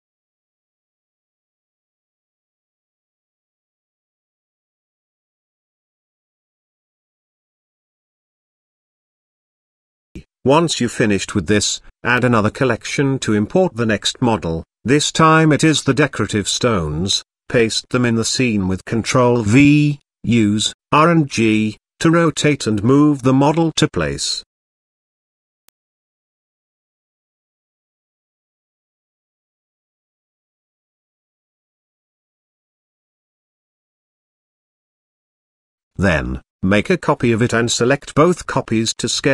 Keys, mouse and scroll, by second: 0.1-0.6 scroll up 1, 0.6-1.1 middle drag, 1.2-1.8 shift+middle drag, 2.3-2.8 middle drag, 5.1-5.5 scroll up 1, 6.8 z, 9.2 click, 11.0 click, 12.3 ctrl+v, 13.2 KP_7, 14.9 g, 16.1 z, 17.7 r, 21.1 r, 23.5 g, 25.6-26.2 middle drag, 26.3 z, 27.4 scroll up 1, 27.5-27.9 shift+middle drag, 28.3-29.0 middle drag, 29.4 g, 32.7 scroll up 1, 32.7-34.6 middle drag, 35.1 scroll up 1, 35.1-35.5 middle drag, 35.7 shift+middle click, 36.3 shift+d.